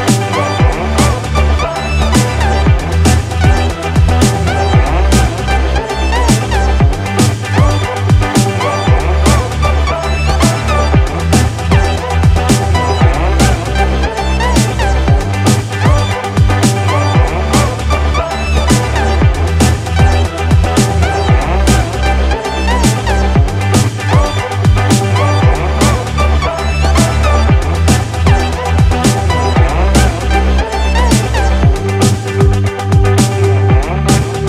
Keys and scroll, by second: 19.6 ctrl+=, 30.5 ctrl+z, 31.7 ctrl+alt+z, 34.2 ctrl+=.